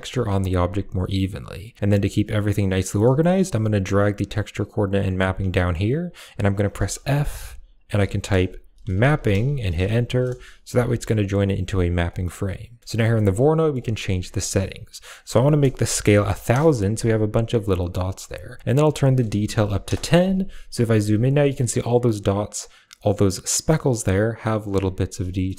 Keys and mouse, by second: 1.9-2.7 drag, 3.0 middle click, 3.4 g, 5.4 click, 6.5 f, 9.0 p, 10.6 a, 11.4 click, 11.9 middle click, 12.4 click, 13.0 middle click, 14.9-16.4 drag, 15.9 0, 16.0 0, 17.6 middle click, 18.6-19.7 drag, 25.2 middle click.